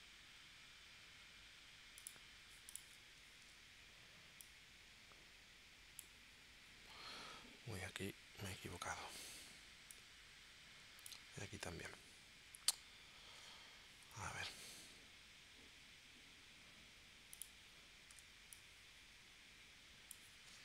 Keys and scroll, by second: 3.4 shift+c, 11.8 super+z, 14.0 p, 18.1 a.